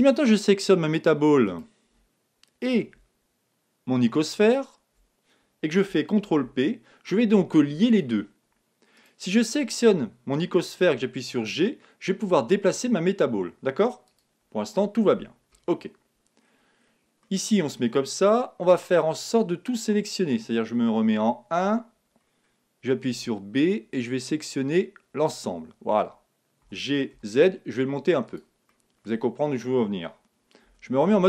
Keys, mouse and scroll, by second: 0.9-2.7 drag, 1.4-3.4 right drag, 4.4-6.2 right drag, 6.2 ctrl+p, 8.9-11.4 right drag, 10.8 g, 14.1-15.9 drag, 15.5 KP_1, 16.4-17.2 scroll down 1, 17.2-20.9 middle drag, 21.1 KP_1, 22.1-22.5 scroll up 1, 22.5-24.3 middle drag, 23.1 b, 26.6 g, 28.7-31.2 middle drag, 30.5 scroll down 1, 30.6 z.